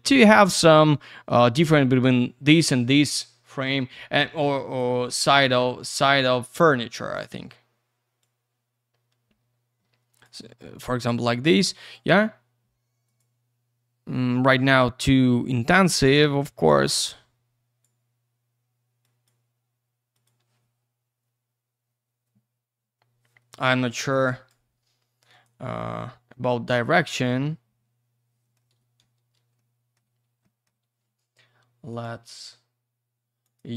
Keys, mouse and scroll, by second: 3.7 click, 8.4 click, 11.8 click, 11.9 click, 13.0 click, 13.2 click, 15.3 click, 19.0 click, 20.1 click, 20.2 click, 23.9 click, 25.3 click, 25.4 click, 28.4 middle click, 28.8 p, 29.0 z, 29.6 alt+middle click, 30.1 q, 30.4 alt+middle click, 30.8 q, 31.9 click, 32.0 click, 33.4 click, 33.5 click, 33.7 click.